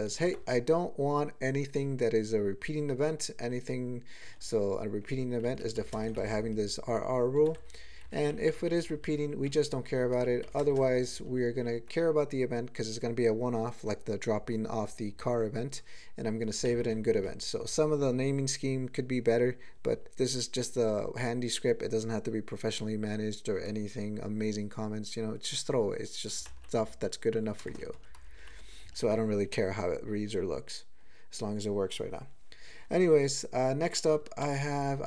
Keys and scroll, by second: 0.1 ctrl+g, 4.4-5.0 ctrl+p, 5.4 ctrl+n, 5.6 ctrl+e, 5.8 ctrl+b, 6.0 ctrl+space, 7.4 ctrl+g, 7.6 ctrl+e, 8.0 ctrl+n, 8.2 ctrl+n, 8.4 ctrl+n, 8.6 ctrl+n, 8.8 ctrl+n, 9.0 ctrl+n, 9.3 ctrl+n, 9.8 ctrl+n, 10.4 alt+m, 10.6 ctrl+space, 10.7 ctrl+e, 11.1 ctrl+g, 16.6 alt+m, 16.8 alt+f, 17.1 alt+f, 26.4 alt+m, 27.6 ctrl+space, 28.0 ctrl+g, 28.2 ctrl+n, 28.3 ctrl+n, 28.8 ctrl+a, 34.4 ctrl+space, 34.6 ctrl+n, 34.8 ctrl+n, 34.9 ctrl+n.